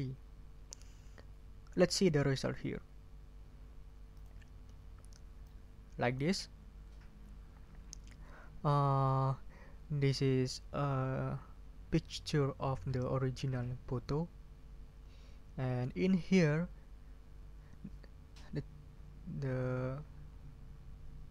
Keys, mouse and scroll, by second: 4.1 click, 5.4 click.